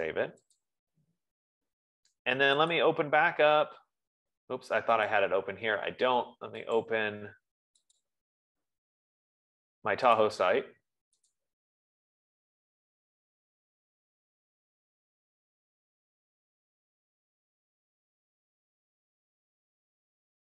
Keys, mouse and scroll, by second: 0.4 click, 1.1 click, 3.4 click, 5.7 click, 7.2 click, 8.5 click, 11.9 click.